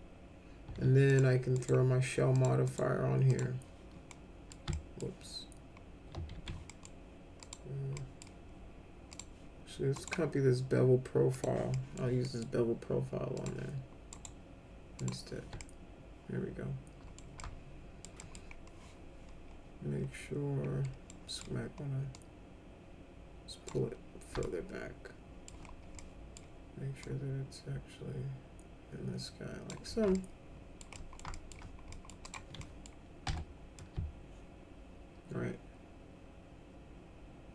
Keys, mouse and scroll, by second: 1.0 click, 1.5 right click, 2.3 click, 2.6 right click, 3.2 click, 4.1 middle click, 4.7 alt+middle click, 6.3 ctrl+z, 6.6 middle click, 7.3 click, 7.9 middle click, 9.1 click, 9.9 right click, 11.3 click, 11.7 middle click, 12.2 middle click, 13.3 click, 14.0 right click, 14.9 click, 15.5-17.1 alt+middle drag, 17.3 alt+middle click, 18.1 middle click, 21.0 middle click, 22.1-23.6 drag, 24.4-25.5 alt+middle drag, 26.0 middle click, 27.0-29.7 drag, 30.2 alt+middle click, 31.0 middle click, 31.3 alt+middle click, 31.9 middle click, 32.3 click, 32.6 middle click, 33.3 F4, 33.8-37.5 alt+middle drag.